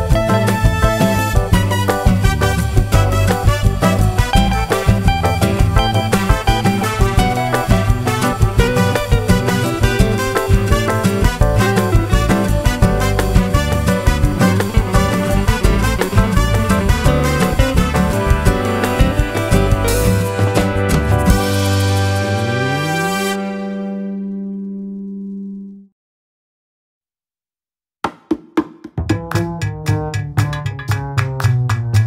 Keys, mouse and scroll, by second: 0.6 ctrl+click, 1.4 click, 3.1 click, 4.2 click, 4.9 click, 6.0 click, 6.4 middle click, 7.6 click, 11.0 click, 13.1 click, 15.1 KP_Add, 15.8 click, 17.1-18.1 drag, 19.5 click, 21.2 click, 23.3 click, 28.9 shift+click, 30.6 shift+click.